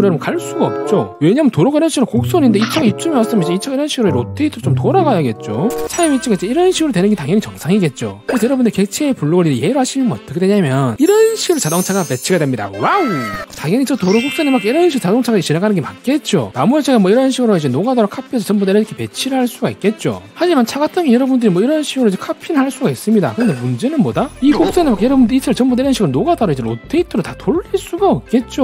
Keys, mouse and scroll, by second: 1.1 c, 1.3 right click, 1.5 click, 2.1 right click, 2.3 click, 3.3 click, 4.1 r, 4.8 right click, 5.0 click, 5.4 right click, 5.6 click, 7.3 click, 16.9 shift+right click, 17.3 d, 17.6 click, 17.9 shift+right click, 18.2 d, 18.4 click, 18.7 shift+right click, 19.2 click, 19.4 shift+right click, 20.0 click, 20.2 right click, 21.0 d, 21.6 click, 21.9 shift+right click, 22.4 click, 22.8 shift+right click, 23.1 click, 23.5 shift+right click, 24.1 click, 25.0 click, 25.2 click, 25.9 click, 27.5 click.